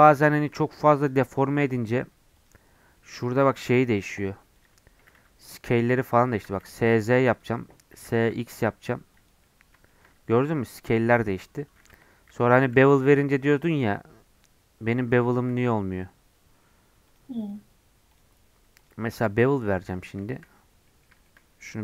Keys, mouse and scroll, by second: 0.3 shift+a, 1.4 shift+middle click, 2.3-3.3 drag, 3.3 s, 4.9 g, 6.2 shift+middle click, 6.5 s, 7.9 s, 9.4-11.8 middle drag, 11.8 Tab, 12.3 2, 12.7 ctrl+b, 15.3 ctrl+z, 16.0 Tab, 17.0-20.2 drag, 20.2 shift+middle click, 20.5 scroll up 2, 20.8-21.8 middle drag.